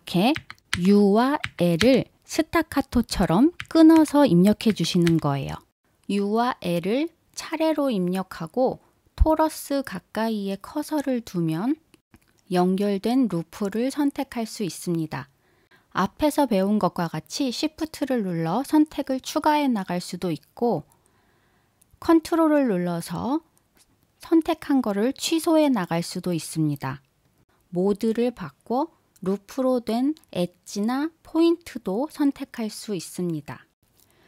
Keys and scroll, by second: 5.7 l.